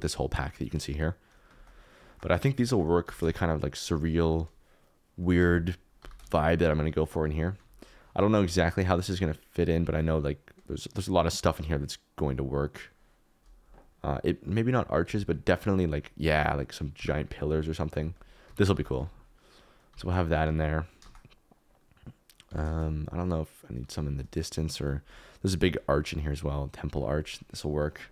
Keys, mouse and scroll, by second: 2.0 shift+middle click, 2.6 shift+middle click, 2.8 middle click, 3.0 g, 3.2 shift+z, 5.4 alt+r, 5.9 g, 6.2 shift+z, 7.5 s, 14.5 click, 15.0 x, 15.7 click, 16.3-18.7 typing, 19.8 g, 20.6 alt+d, 21.0 shift+z, 22.4 g, 22.6 shift+z.